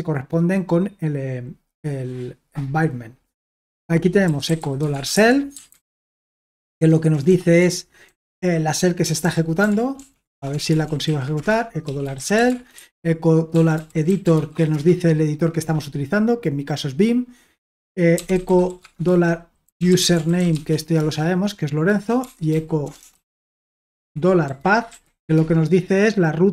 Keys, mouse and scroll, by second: 4.0-15.1 typing, 11.4 Return, 17.9-25.5 typing.